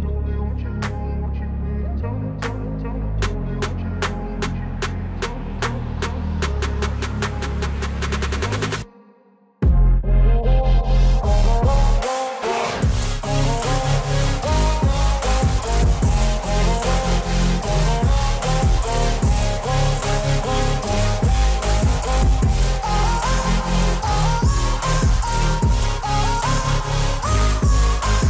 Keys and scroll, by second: 6.5 alt+x, 11.2 ctrl+z.